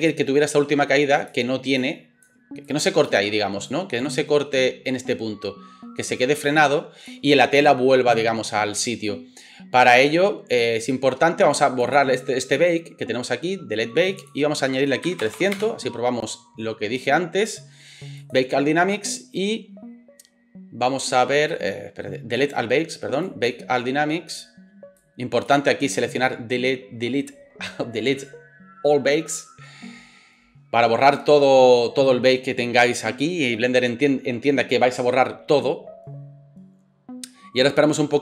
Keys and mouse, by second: 15.4 KP_0.